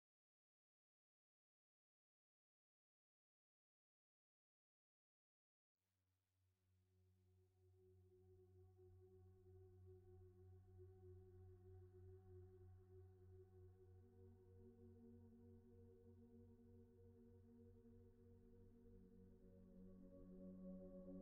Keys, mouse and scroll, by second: 0.4 right click, 0.9 ctrl+z, 1.5 typing, 2.7 Return, 3.2 typing, 7.3 Return, 8.5 g, 11.5 Tab, 11.8 g, 13.0 Tab, 14.8 alt+z, 16.6 middle click.